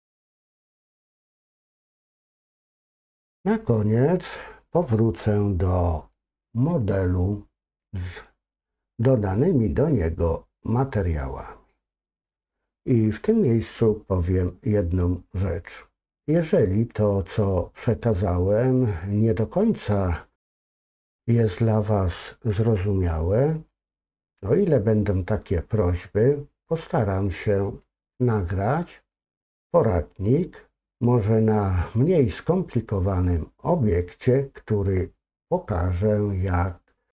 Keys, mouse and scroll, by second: 0.6 shift+middle click.